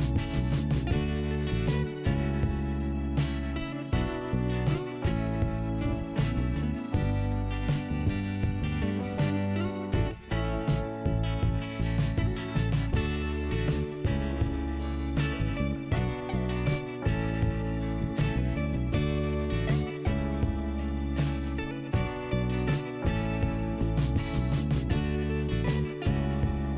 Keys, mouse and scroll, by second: 0.7 scroll up 1, 2.3 click, 2.4 click, 3.4 click, 4.2 click, 5.7 middle click, 8.5 click, 8.5 click, 9.9 click, 11.8 click, 14.3 scroll down 1, 15.5 click, 18.3-18.7 scroll up 2, 20.2 scroll up 1, 21.1 click, 23.4 click, 25.0 scroll down 1.